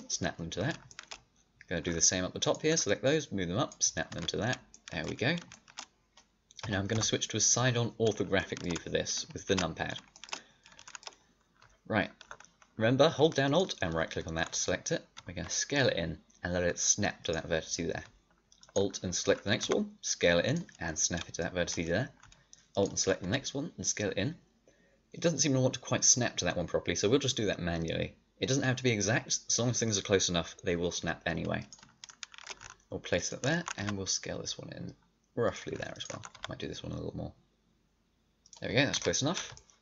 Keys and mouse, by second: 1.0 click, 2.3 middle click, 3.6-4.8 middle drag, 4.0 a, 4.8-6.5 drag, 6.5 KP_3, 6.9 KP_5, 13.4-14.5 right drag, 14.5-17.1 drag, 15.1 s, 18.4-19.5 middle drag, 19.5 s, 21.6-22.6 drag, 23.2 s, 32.0 middle click, 33.1 middle click, 33.7 s, 36.2 s, 38.7 middle click, 38.9 a.